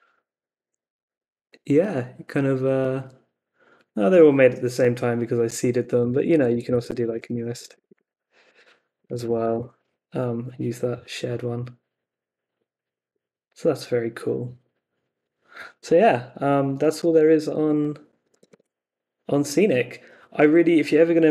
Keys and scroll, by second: 5.5 Up, 6.0-9.4 typing, 9.5 Return, 17.4 super+Tab.